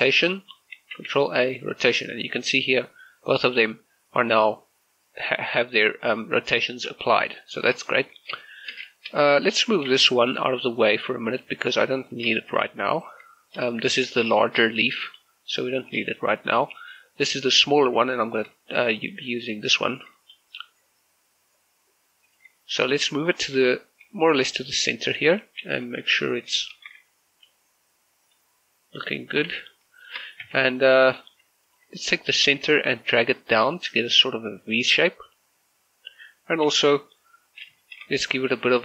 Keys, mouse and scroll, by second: 0.5 right click, 1.0 ctrl+a, 1.7 click, 4.4 right click, 7.1 right click, 7.3 shift+middle click, 9.4 right click, 10.1 shift+middle click, 10.7 g, 12.0 click, 12.7 shift+middle click, 14.3 shift+z, 15.0 shift+middle click, 16.3 shift+middle click, 17.1 right click, 18.2 shift+middle click, 18.7-19.8 scroll up 1, 19.8 z, 20.4 g, 22.3 click, 22.7 shift+middle click, 22.9-24.1 scroll up 3, 23.3 shift+middle click, 24.1 g, 25.2 click, 25.5 scroll down 1, 26.3 scroll up 1, 26.7 shift+middle click, 27.0-27.5 scroll up 1, 27.5 g, 28.3 click, 28.6-29.9 scroll down 1, 30.1 shift+middle click, 30.3 scroll up 1, 30.5 Tab, 30.8 middle click, 31.1-31.5 scroll up 1, 31.7 alt+right click, 32.1 middle click, 32.5 scroll up 1, 33.3-36.4 drag, 36.4-37.5 scroll down 1, 37.5-37.9 scroll up 2, 38.3 scroll down 1, 38.6-38.8 typing.